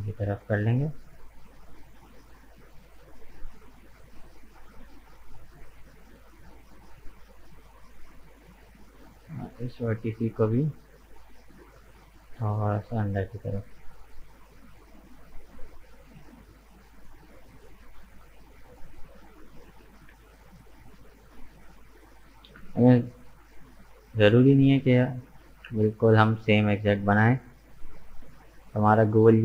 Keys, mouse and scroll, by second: 4.0-8.2 middle drag, 8.9-10.3 drag, 10.3 right click, 10.6-12.0 middle drag, 12.0 g, 14.4-16.4 middle drag, 16.4 Tab, 16.5 right click, 17.0-18.6 middle drag, 18.6 right click, 18.9 Tab, 19.4-20.5 middle drag, 20.5 Tab, 20.6 right click, 21.0 middle click, 21.5 right click, 21.7 Tab, 22.0-25.0 middle drag, 25.3 click, 26.2 right click, 26.5-29.4 middle drag.